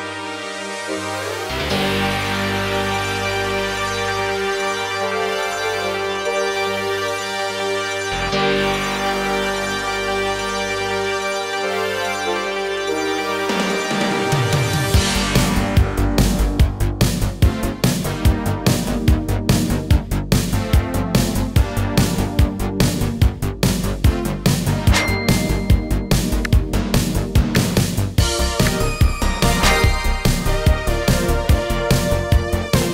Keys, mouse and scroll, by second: 0.4 click, 2.7 shift+click, 4.0-4.7 alt+drag, 8.1-9.0 drag, 11.5 r, 12.3 click, 15.0-20.7 drag, 27.8-28.1 drag.